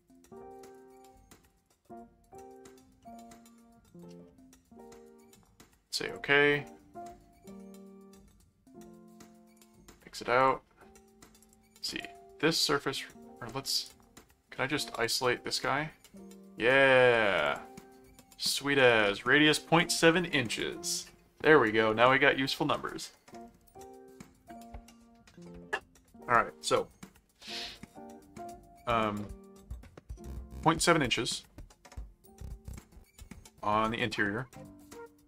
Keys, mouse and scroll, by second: 1.5-3.1 drag, 3.0 middle click, 4.2 middle click, 5.0 right click, 6.1 click, 9.5 click, 10.4 click, 11.4 click, 13.6 click, 13.8 right click, 14.9 click, 16.0-17.2 middle drag, 17.4 click, 18.8 middle click, 32.7 click, 34.9 click, 35.0-35.2 typing.